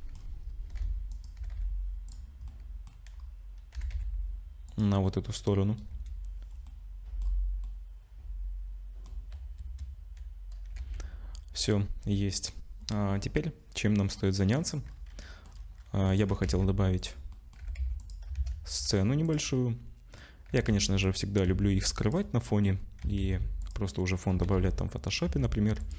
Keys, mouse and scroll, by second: 0.1-0.7 scroll down 7, 0.7 g, 1.3 g, 2.4 middle click, 3.2-3.5 scroll up 2, 3.7 g, 5.0 middle click, 5.8 KP_0, 6.7 middle click, 7.2-7.6 scroll down 4, 7.6 middle click, 9.6 KP_0, 10.8 ctrl+s, 11.3-11.8 scroll down 2, 14.2 middle click, 14.8-15.8 scroll down 7, 15.3 middle click, 16.1 click, 16.3 g, 17.3 middle click, 17.6 g, 18.3 shift+a, 19.5 middle click, 20.5 g, 21.4 s, 22.4 middle click, 22.7-23.0 scroll down 4, 23.0 s, 23.9 middle click, 24.3 g, 25.2 Tab, 25.7 2, 25.8 click.